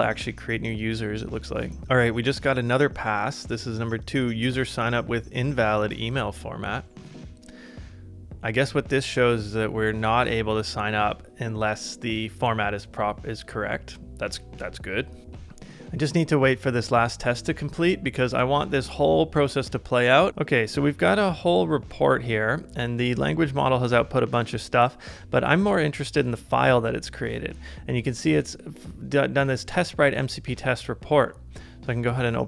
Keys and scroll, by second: 15.2 super+Tab.